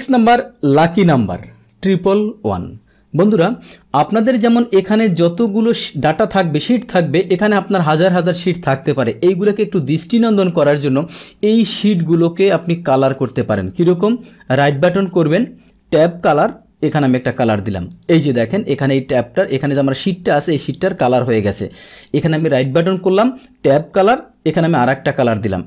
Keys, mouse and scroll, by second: 11.8 click, 12.4 click, 12.8 click, 13.2 click, 14.5 right click, 16.9 click, 17.9 click, 24.6 click, 25.3 click.